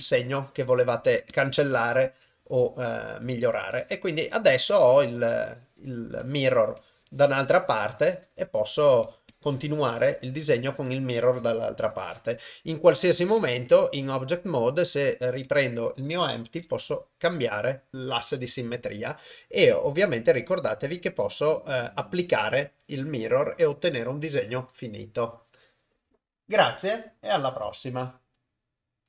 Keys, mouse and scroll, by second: 1.3 ctrl+click, 3.8 click, 4.3 click, 5.3 click, 6.2 click, 6.8 click, 7.8 click, 8.7 click, 9.0 click, 9.3 click, 9.7 click, 10.0 click, 10.6 click, 10.9 click, 11.4 click, 11.8 click, 13.4 ctrl+Tab, 16.6 g.